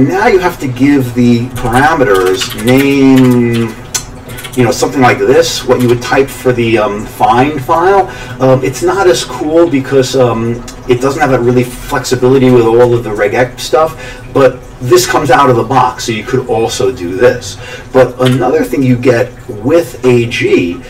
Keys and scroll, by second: 1.3-5.0 typing, 5.8 Return, 18.3 q.